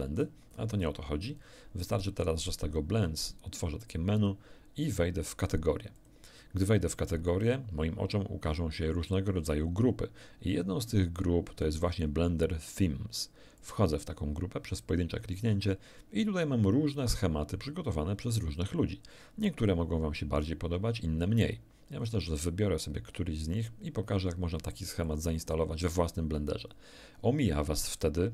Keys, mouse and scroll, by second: 0.2 scroll up 1, 6.0 click, 13.6 click, 17.5-17.8 scroll down 1, 18.1-18.4 scroll down 1, 18.6-19.0 scroll down 1, 19.2 scroll down 1, 21.4 scroll down 2, 22.0 scroll down 2, 25.0 click.